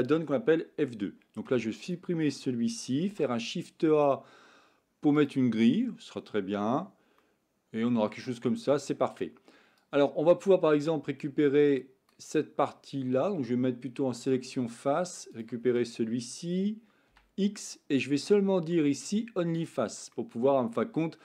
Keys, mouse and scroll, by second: 1.5 x, 3.0 shift+a, 6.6 Tab, 7.2 middle click, 9.7-12.2 drag, 17.1 x, 20.2-21.2 middle drag.